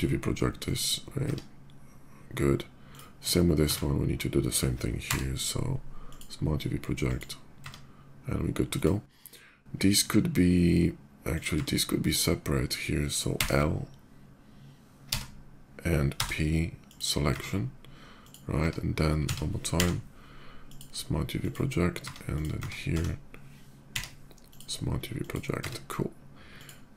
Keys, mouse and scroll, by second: 0.2 click, 1.0 Tab, 2.6 click, 3.1 Tab, 3.6 a, 5.1 u, 5.6 click, 6.7 click, 7.3 Tab, 8.5 click, 11.0 click, 11.4 Tab, 11.9 click, 13.1 l, 15.9 p, 16.6 click, 17.2 Tab, 17.9 click, 19.0 a, 19.5 u, 20.2 a, 20.3 click, 21.2 click, 21.7 Tab, 22.1 click, 22.6 Tab, 22.7 a, 24.3 click, 24.3 u, 25.0 click, 25.3 Tab, 26.3 click.